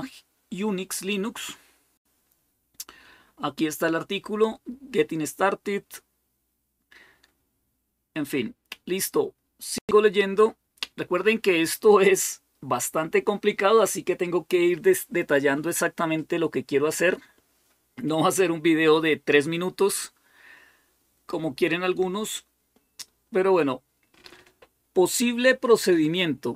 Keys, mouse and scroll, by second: 1.4-4.3 scroll down 4, 4.7-5.3 scroll down 2, 5.9-6.9 scroll down 1, 6.9-7.7 scroll up 1, 8.1-10.9 scroll down 1, 21.4-22.8 scroll down 2.